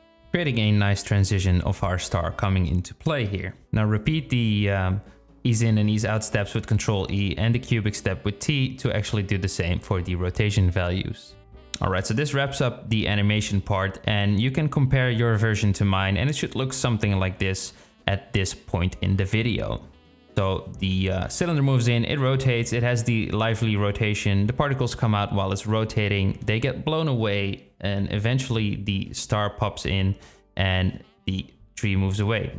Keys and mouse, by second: 0.0 space, 3.9 space, 3.9 click, 4.8 ctrl+e, 6.7 t, 8.3 click, 8.6 space, 12.2 space, 13.6 click, 14.0 space.